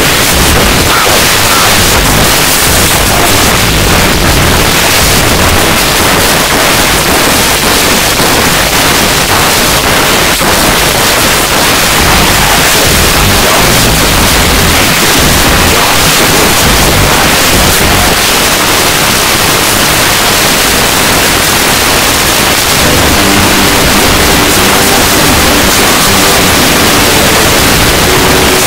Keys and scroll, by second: 5.7 Page_Down, 18.1 Page_Down.